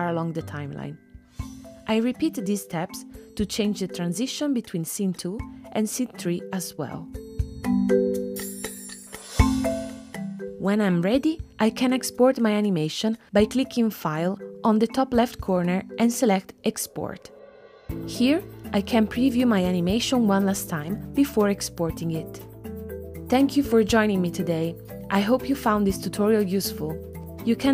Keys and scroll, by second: 0.0 space, 5.4 2, 6.0 Return, 6.6 space, 24.3 space.